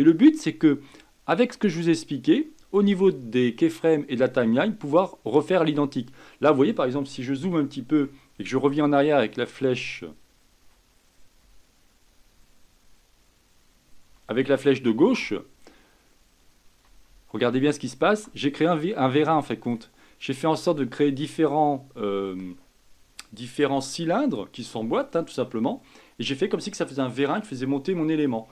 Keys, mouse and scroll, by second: 0.4-3.5 middle drag, 3.9-4.4 scroll down 1, 4.4-6.0 middle drag, 6.0-7.5 scroll up 5, 7.5-8.6 shift+middle drag, 8.6-10.6 Right, 10.9-11.4 scroll down 4, 11.4-14.1 Left, 15.2-16.8 Left, 17.1-18.2 Left, 18.4-19.0 scroll up 5, 19.0-20.2 middle drag, 20.2-20.9 drag, 20.9-23.9 middle drag.